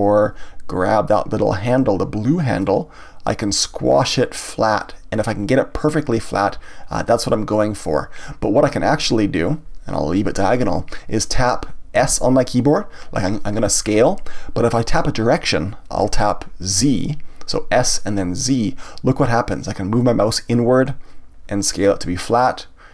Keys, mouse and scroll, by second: 2.6-5.6 drag.